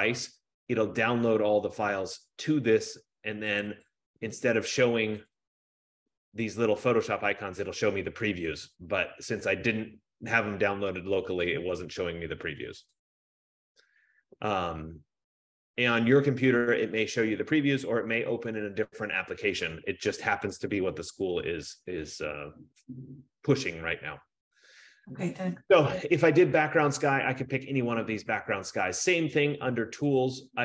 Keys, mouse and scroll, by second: 0.0 click, 3.8 click, 3.9 click, 5.4 click, 5.7 click, 8.5 F15, 13.8-18.3 drag, 30.3-30.6 drag, 30.4-30.6 scroll down 1.